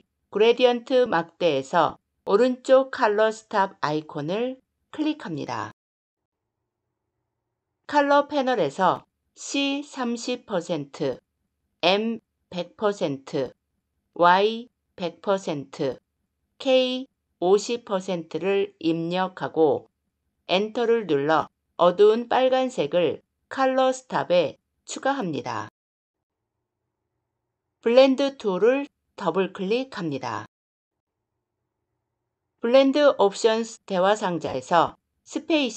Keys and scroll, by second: 20.3 Return.